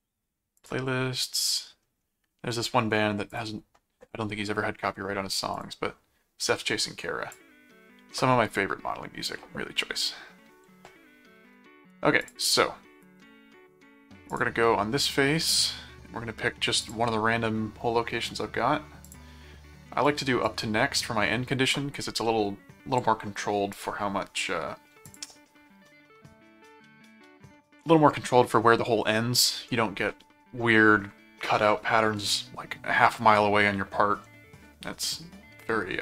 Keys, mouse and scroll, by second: 0.6 click, 3.3 click, 5.5 click, 6.4 click, 12.2 click, 14.3 click, 15.5 click, 16.8 click, 19.0 click, 20.1 click, 23.7 click, 25.0 click.